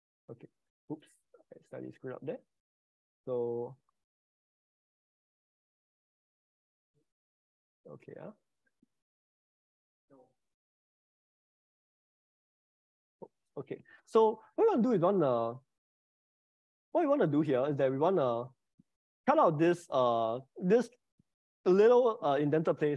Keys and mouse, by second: 0.9 click, 1.7 click, 3.0 click, 4.9 click, 6.1 click, 7.4 click, 8.8 click, 9.2-10.6 middle drag, 11.4 click, 13.8 click, 18.1 click, 19.2 Delete.